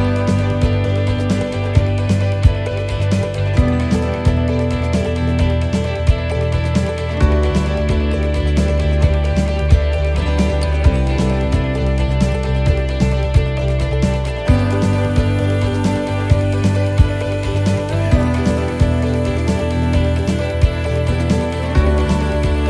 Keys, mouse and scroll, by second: 0.0 middle click, 0.5 shift+middle click, 1.3 scroll up 1, 2.1-2.4 scroll down 1, 4.2 s, 8.1 s, 9.6 middle click, 11.8 click, 15.0 click, 15.0 middle click, 15.9 scroll up 1, 16.2 middle click, 18.4 shift+d, 21.3 s.